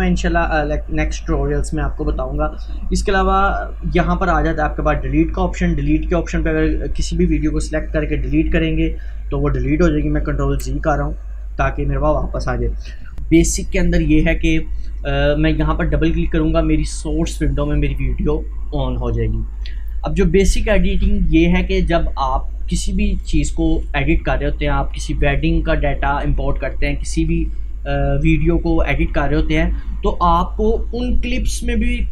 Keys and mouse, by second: 2.3 click, 4.8 click, 10.5 ctrl+z, 12.5 click, 15.3-25.5 drag.